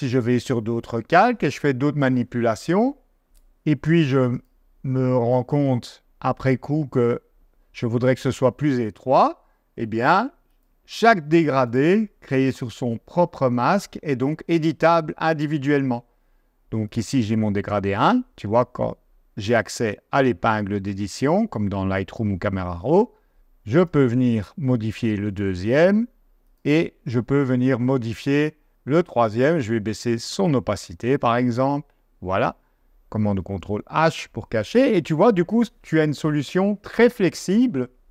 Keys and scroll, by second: 33.4 super+h.